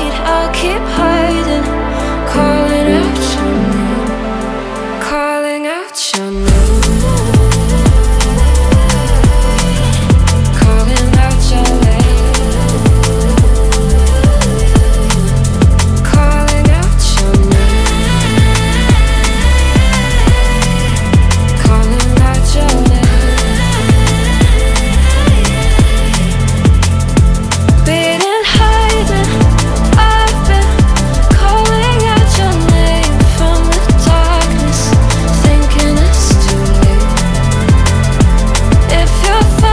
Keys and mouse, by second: 2.0 KP_3, 2.8 shift+z, 6.4 y, 8.0 click, 8.7 click, 9.5 g, 9.6 y, 11.1 Tab, 13.5 y, 14.5 click, 15.2 y, 15.7 middle click, 16.0 middle click, 16.6 shift+z, 16.9 click, 17.2 shift+click, 17.6 click, 18.2 shift+click, 18.7 middle click, 19.7 KP_1, 20.7 middle click, 21.4 g, 21.4 y, 21.9 right click, 22.7 g, 22.8 y, 24.3 click, 24.9 KP_3, 25.0 shift+z, 25.7 g, 25.8 y, 26.3 click, 27.1-27.6 drag, 28.1 y, 29.1 click, 30.3 y, 31.3 click, 31.6 shift+z, 31.9 middle click, 32.5 click, 32.9 shift+click, 33.3 middle click, 34.0 y, 35.7 click, 36.0 middle click, 37.0 KP_1, 37.9 click, 38.6 shift+click, 39.2 z.